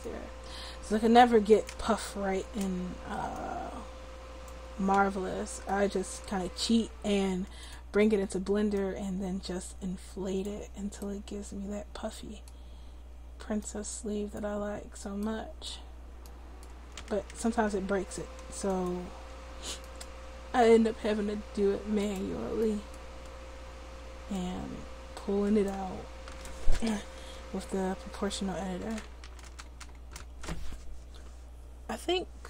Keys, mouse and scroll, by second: 0.0 click, 0.6 middle click, 5.2 middle click, 7.6-10.6 drag, 10.6 middle click, 11.6 middle click, 12.2 middle click, 12.8 middle click, 13.6-15.2 drag, 17.5 ctrl+z, 17.9 ctrl+z, 18.7-20.0 drag, 19.3 ctrl+z, 20.8 Tab, 24.3-25.7 drag, 25.8 click, 25.8 ctrl+z, 29.3 g.